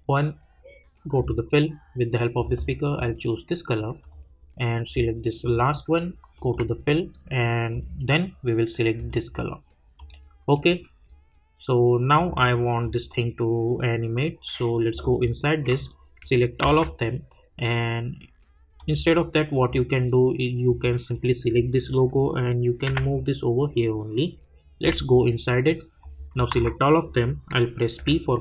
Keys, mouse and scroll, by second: 0.0 click, 11.0-11.5 scroll down 1, 12.1 click, 14.9 click, 16.6 ctrl+a, 18.8 click, 24.8 click, 28.0 p.